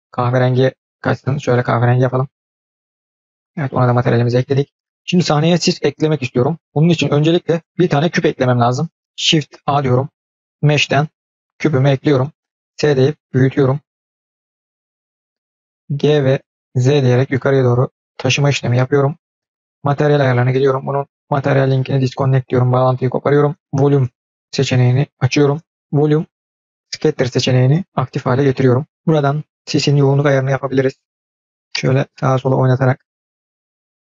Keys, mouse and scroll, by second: 3.7 click, 9.5 shift+a, 14.9-15.9 scroll down 3, 15.9 g, 19.5 click, 20.4-22.1 drag, 23.6 click, 25.7 click, 29.5-32.6 drag, 33.7 click.